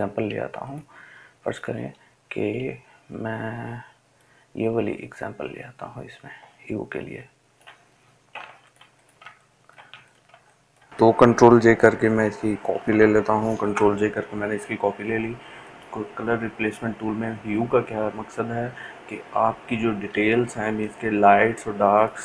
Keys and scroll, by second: 0.3 ctrl+alt+z, 0.8-3.8 ctrl+alt+z, 10.6 ctrl+space.